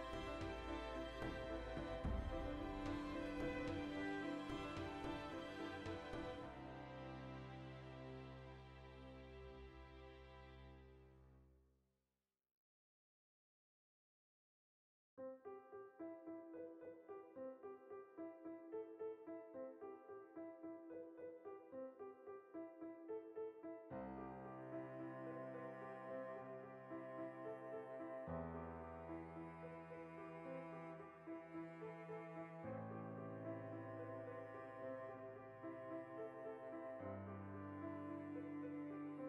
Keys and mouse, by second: 2.2 right click, 2.9 alt+shift+right click, 3.1 middle click, 3.5 shift+right click, 4.1-8.6 middle drag, 6.4 click, 7.3 ctrl+KP_Add, 8.6 alt+shift+right click, 8.8 middle click, 9.3 alt+shift+right click, 9.8 ctrl+i, 11.1 click, 11.1-13.9 middle drag, 13.6 1, 13.9 right click, 14.6 g, 15.7 click, 15.7 right click, 16.1 g, 16.5 click, 16.6-18.6 middle drag, 18.6 right click, 19.2 g, 20.0 click, 20.2 right click, 20.2 g, 21.0 click, 21.1 g, 21.5 click, 22.0-34.0 ctrl+middle drag, 27.5 ctrl+2, 34.0 Tab, 34.7 a, 34.9 middle click, 37.0 ctrl+middle click.